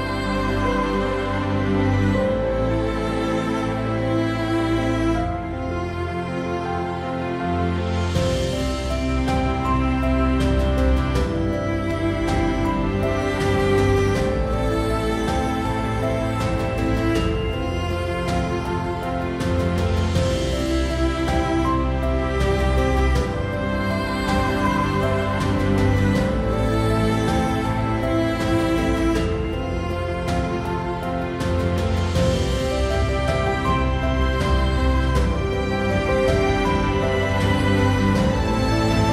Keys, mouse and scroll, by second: 11.5 Tab, 13.6-15.7 drag, 15.7 i, 18.7-20.5 right drag, 21.7-22.8 right drag, 26.2 right click, 34.4 middle click, 35.1-36.5 right drag, 36.5 shift+middle click, 36.6-37.7 shift+right drag, 37.7-38.8 shift+middle drag, 38.8-39.1 right drag.